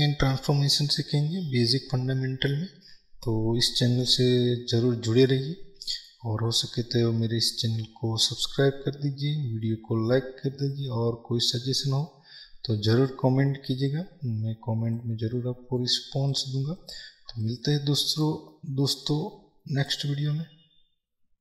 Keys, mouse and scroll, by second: 7.5-8.5 scroll down 2, 8.5-9.7 scroll up 2, 9.7 scroll up 1, 14.1-14.9 scroll down 2.